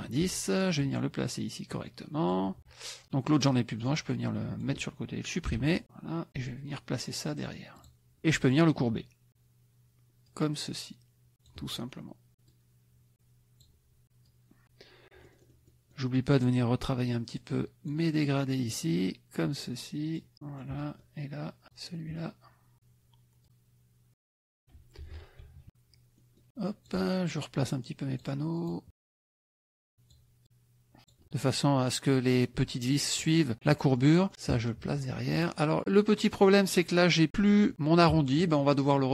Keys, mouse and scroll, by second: 0.7-2.5 ctrl+drag, 3.0 click, 3.9 click, 5.5 Delete, 5.8 click, 7.8 click, 8.4 click, 10.2-11.7 drag, 12.5-13.8 drag, 14.3 click, 15.3 middle click, 16.3 click, 17.3 click, 18.7-20.3 drag, 20.4 middle click, 21.7 click, 22.7 click, 23.4 click, 25.0 F1, 25.5 KP_Subtract, 26.2 middle click, 26.5 click, 27.3-28.4 drag, 28.6 click, 29.1-30.3 drag, 30.4 click, 34.0 click, 35.3 click, 36.2 middle click.